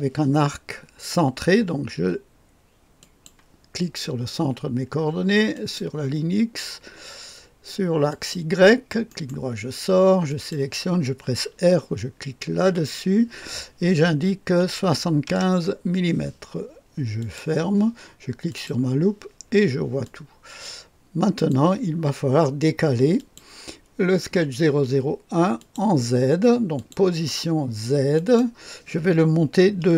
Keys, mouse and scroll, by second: 3.0 click, 5.5 click, 8.1 click, 9.1 right click, 10.2 click, 12.6 r, 14.6 KP_7, 14.9 KP_5, 15.2 Return, 17.2 click, 17.5 click, 18.5 click, 20.0-22.0 drag, 23.1 click, 25.5 click, 26.7-28.8 drag, 29.8 KP_1.